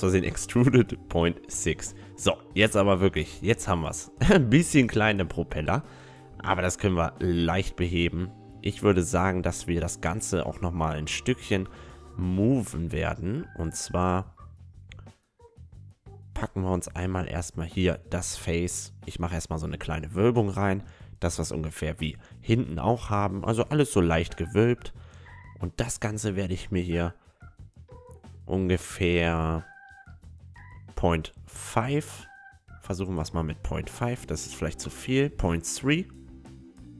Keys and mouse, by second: 0.0 ctrl+z, 0.7 s, 2.5 click, 2.7 click, 3.3 Tab, 5.3 Tab, 5.9 right click, 10.5-12.4 drag, 13.7 a, 14.9-16.7 drag, 15.7-19.3 right drag, 17.8-20.3 drag, 18.6 middle click, 20.7-22.5 middle drag, 23.1 a, 24.0-26.3 drag, 24.8-26.6 right drag, 25.1-26.8 middle drag, 26.8-28.8 drag, 29.9 g, 32.3 g, 34.8 g.